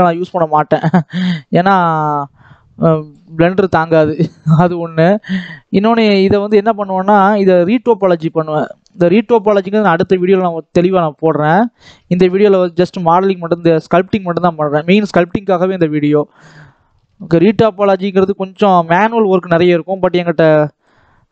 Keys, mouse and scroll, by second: 0.1 shift+click, 0.8 scroll up 2, 1.0-2.5 shift+middle drag, 2.5-4.4 shift+drag, 4.4 shift+middle click, 5.3-7.4 shift+drag, 7.4 shift+middle click, 8.3 shift+click, 9.0 shift+middle click, 9.7-11.4 shift+drag, 11.4 shift+middle click, 11.9-12.5 scroll down 7, 12.5-14.5 shift+middle drag, 14.5-15.3 scroll down 1, 15.3-18.0 middle drag, 18.0-18.4 scroll up 1, 18.4-18.7 scroll down 1, 18.7 middle click, 19.4-20.9 scroll up 2.